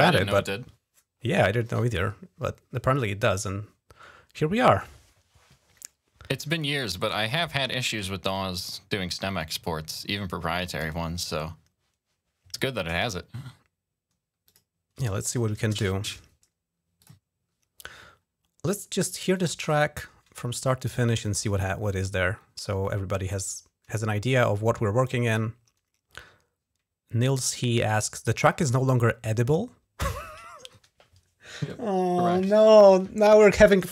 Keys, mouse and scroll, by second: 16.8 click, 19.1 click.